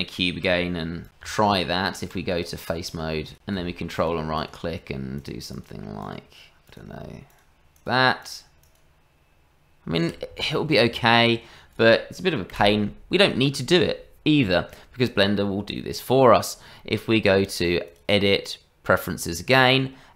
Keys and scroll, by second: 0.2 s, 0.6 g, 1.2 Tab, 10.9 Tab, 12.5 Delete.